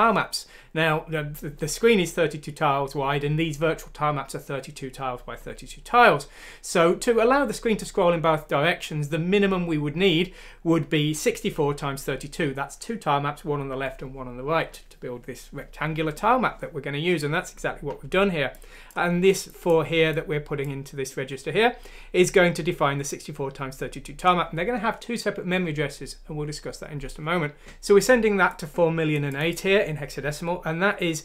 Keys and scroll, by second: 27.6 Left.